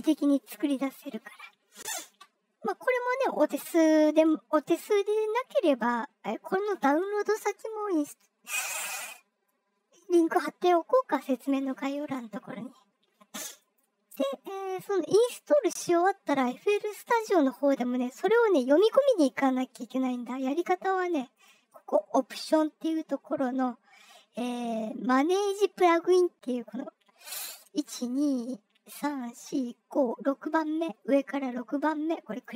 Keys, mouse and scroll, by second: 13.5 click, 20.4 click, 21.3 click, 32.3 click.